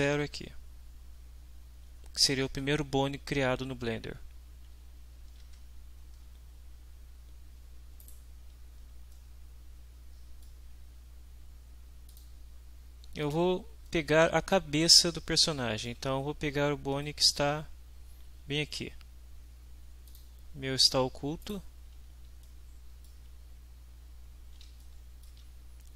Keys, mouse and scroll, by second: 5.5 alt+Tab, 8.0 right click, 9.1-10.6 middle drag, 12.1 click, 13.9-15.2 ctrl+middle drag, 15.4-16.0 ctrl+shift+drag, 16.4-17.2 ctrl+middle drag, 20.1 click, 21.4 right click, 22.4-23.2 shift+middle drag, 24.8-25.5 shift+middle drag.